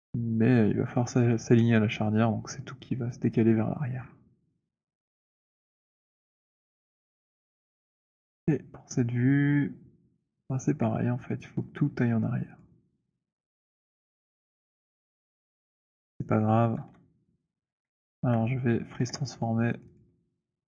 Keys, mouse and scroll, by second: 3.9 middle click, 4.1 middle click, 4.4-6.1 scroll down 16, 6.1 scroll, 6.9 alt+middle click, 7.7 w, 12.6 click, 13.4 shift+click, 16.7 z, 17.7 alt+d, 19.1 alt+f, 19.8 click, 20.0 click.